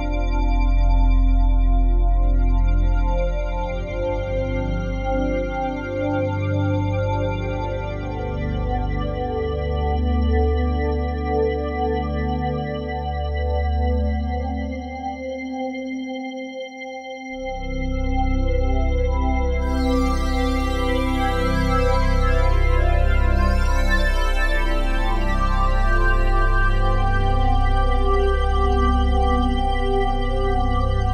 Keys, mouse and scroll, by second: 0.6 g, 0.9 x, 2.8 Escape, 5.7 ctrl+z, 6.4 ctrl+z, 8.1 click, 9.2-11.0 alt+shift+drag, 11.0 -, 11.6-14.9 drag, 14.9 shift+s, 18.1-21.3 drag, 20.0 typing, 21.3 typing, 21.9-23.7 drag, 23.7-24.4 typing, 26.1-27.7 typing, 29.0-31.1 drag.